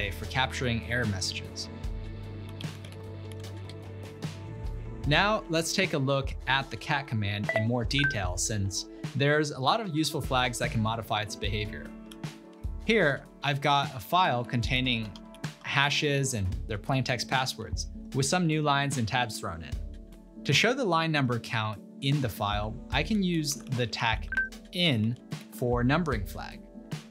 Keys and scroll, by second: 1.1 typing, 2.3-4.3 typing, 9.9-10.9 typing, 12.2 ctrl+l, 13.6-16.9 typing, 23.2 ctrl+p, 23.7 ctrl+Left, 23.9 ctrl+BackSpace, 24.7-26.6 typing.